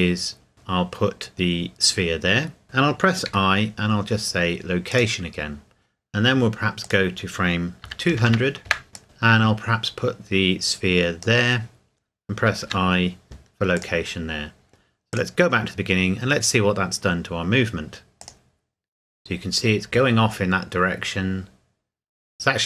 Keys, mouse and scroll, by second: 4.9 click, 7.8 KP_2, 8.1 KP_0, 8.7 KP_Enter, 8.9 click, 12.6 i, 13.7 click, 18.2 click.